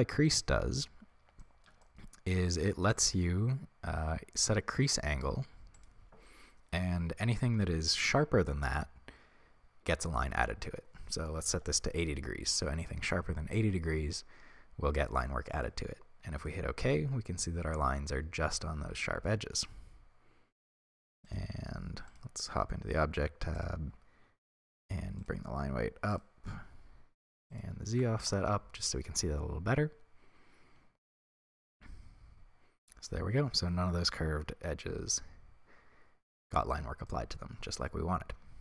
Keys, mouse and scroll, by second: 2.9-16.5 drag, 16.5-24.9 middle drag, 24.9 click, 26.1 click, 26.8 scroll down 1, 28.2-29.2 drag, 28.3 Return, 29.2-38.6 middle drag.